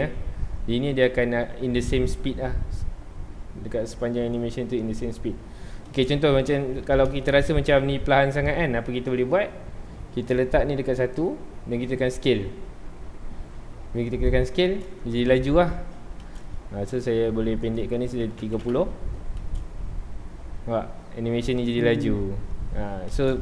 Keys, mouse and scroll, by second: 0.0 space, 5.9 space, 6.6-7.2 scroll up 2, 7.2-10.3 shift+middle drag, 10.3-12.1 drag, 12.1 s, 14.3 click, 14.7 space, 16.2 space, 17.6-18.7 drag, 18.7 KP_Enter, 19.4 space, 19.5 space, 23.1 space.